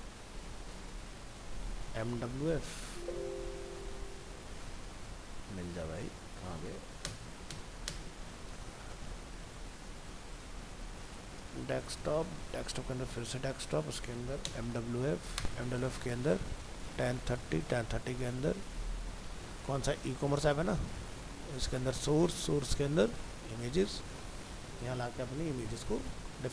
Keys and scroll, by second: 8.8 alt+Up, 23.7 ctrl+v, 26.0 alt+Tab.